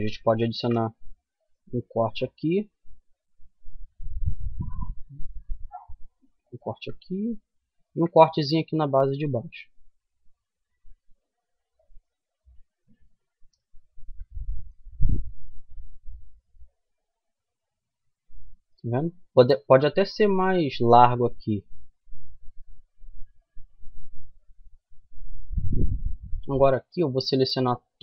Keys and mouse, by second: 6.9 ctrl+r, 11.6 middle click, 12.8 Tab, 13.5 middle click, 15.1-16.8 middle drag, 19.0-20.8 middle drag, 22.2 Tab, 26.2-27.6 middle drag, 27.7 click.